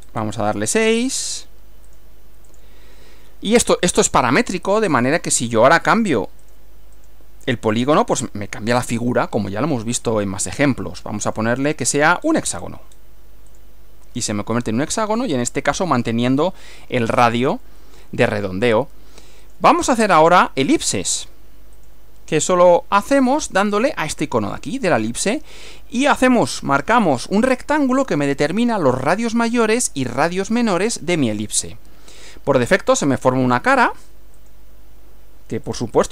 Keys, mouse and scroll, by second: 1.9 click, 2.5 click, 5.1 click, 6.5 click, 7.0 click, 8.2-8.9 drag, 11.3 click, 12.3-13.2 scroll up 5, 13.5 click, 17.7-18.7 middle drag, 19.5 click, 20.5 shift+middle click, 21.1 shift+scroll down 1, 21.8 click, 23.3 click, 24.7 click, 26.2 click, 30.1 click, 31.7-34.1 middle drag, 34.4 click, 35.7 click.